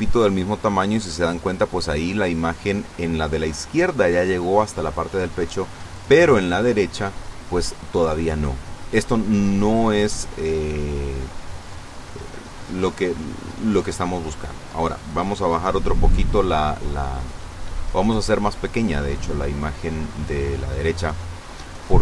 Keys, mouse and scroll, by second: 0.7 click, 1.1 click, 4.0 a, 5.1-8.6 drag, 8.7 ctrl+z, 11.0 scroll down 2, 12.3 click, 13.2 click.